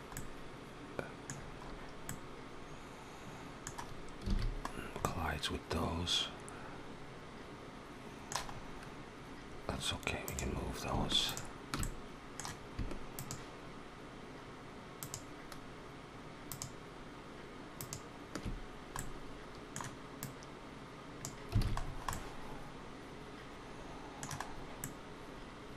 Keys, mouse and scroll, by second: 0.1 middle click, 1.2-1.6 scroll down 3, 1.9 middle click, 4.1 alt+a, 4.5 scroll down 2, 4.9 middle click, 7.6 middle click, 8.4-9.1 scroll up 1, 9.3-10.0 scroll up 2, 10.1 click, 11.1 shift+click, 11.6 middle click, 12.9 shift+click, 14.8 shift+click, 17.2 shift+click, 17.9 shift+click, 18.8 middle click, 20.0 click, 21.5 alt+a, 21.6-21.9 scroll down 4, 21.9 middle click, 24.3 scroll down 2, 24.7 middle click.